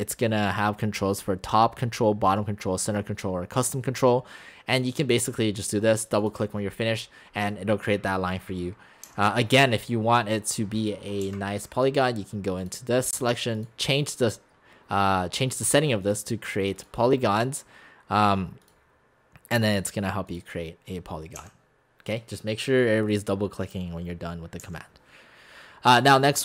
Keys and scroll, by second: 9.1 x, 11.3 Delete, 21.4 x, 24.6 Delete.